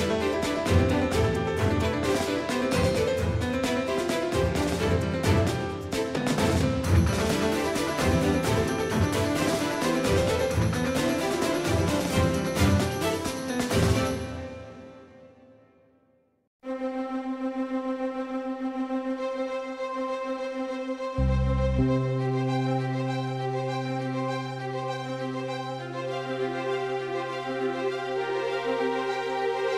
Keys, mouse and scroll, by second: 0.6-3.4 middle drag, 2.5 z, 3.4-5.8 drag, 7.6-11.2 right drag, 9.2-11.5 drag, 12.6 Tab, 13.7 z, 15.5 middle click, 18.2 KP_3, 21.7 right click, 22.2 Tab, 27.1-29.7 drag.